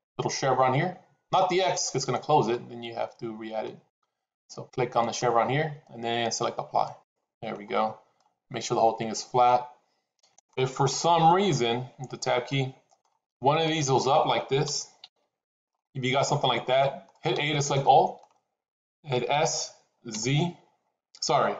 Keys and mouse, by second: 4.9-6.9 drag, 8.1-10.4 middle drag, 11.8 Tab, 12.4 middle click, 13.3 click, 14.5 g, 15.7-17.0 middle drag, 17.2 a, 17.7 middle click, 19.3 s.